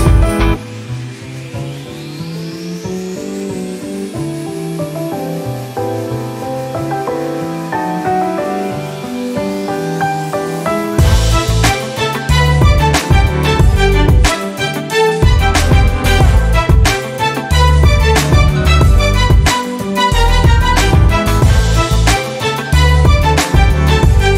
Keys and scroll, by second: 0.0-0.5 typing, 2.1-3.3 typing, 3.6 Return, 5.0-7.4 typing, 8.0 Down, 8.6 Return, 11.1-12.1 typing, 15.7 t.